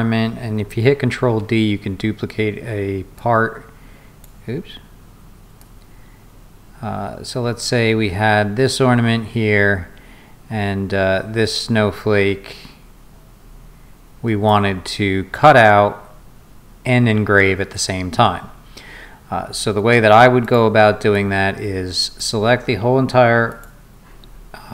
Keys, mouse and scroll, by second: 1.1 ctrl+d, 3.2-4.2 drag, 5.6-14.5 drag, 19.6 scroll down 2, 20.4 click, 21.1-22.2 drag, 23.5 click.